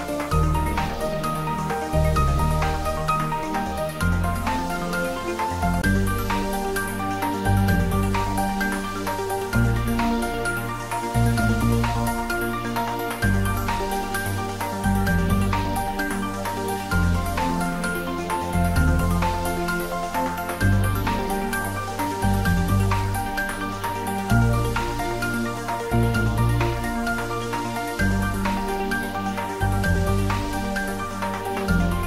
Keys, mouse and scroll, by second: 3.8 click, 8.7 click, 9.6 g, 9.9 y, 11.3 click, 12.2 shift+click, 14.1 shift+click, 14.6-15.6 typing, 16.0 Left, 22.9 Return, 23.7 scroll up 1, 24.7 Tab, 25.0 scroll up 1, 25.6 middle click, 26.4 scroll down 1, 26.6-27.3 middle click, 27.7 click, 28.1-29.0 scroll up 1, 29.0 4, 29.8 click, 30.5 shift+middle click, 31.1 click, 31.9 3.